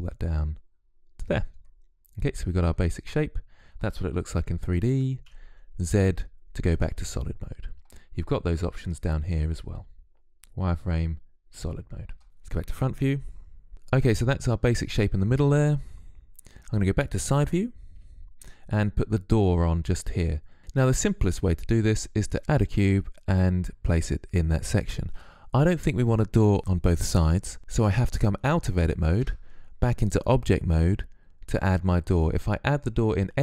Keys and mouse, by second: 2.6-7.8 middle drag, 4.6 z, 8.2-9.7 drag, 9.7 middle click, 12.2 KP_1, 17.2 KP_3, 22.4 z, 28.6 Tab.